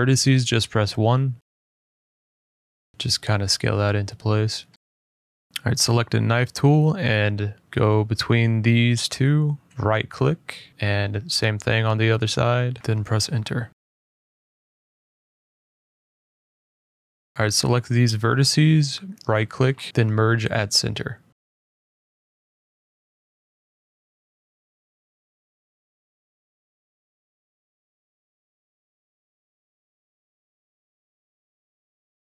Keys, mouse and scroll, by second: 0.6 click, 1.2 middle click, 2.5 click, 2.8 middle click, 2.9 middle click, 4.1 click, 5.5 middle click, 5.5 click, 6.7 click, 7.5 click, 8.4 middle click, 8.9 right click, 9.7 middle click, 10.4 click, 11.1 click, 11.5 right click, 12.4 Return, 13.3 middle click, 13.8 middle click, 14.7-16.6 scroll, 17.3 click, 17.6 shift+click, 18.1 scroll, 18.6 middle click, 19.2 right click, 23.5 click, 24.8 middle click, 25.7 click, 26.2 right click, 27.3 click, 28.1 middle click, 29.1 click, 29.5 right click, 30.2 click, 31.3 click.